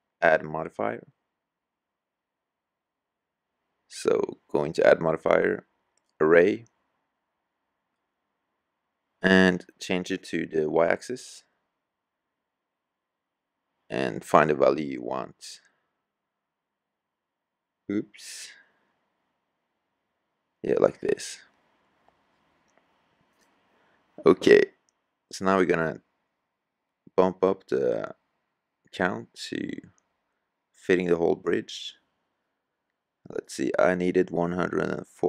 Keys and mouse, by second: 1.1 s, 20.9-22.7 middle drag, 23.8 KP_3, 34.4-34.7 middle drag.